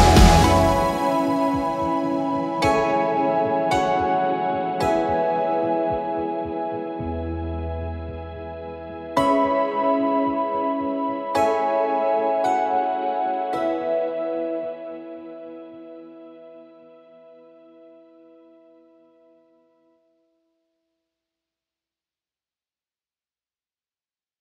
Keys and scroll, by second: 2.6 Escape, 4.0 F3, 5.4 shift+F2, 14.9 space, 15.1 F4, 15.5 Escape, 16.1 F3, 16.7 Escape, 20.5 shift+F2, 22.7 F9.